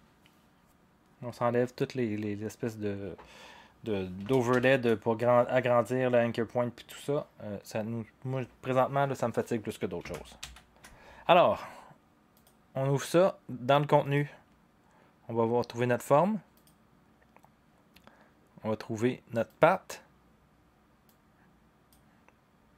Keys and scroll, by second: 4.5 ctrl+shift+h, 10.4 ctrl+shift+h.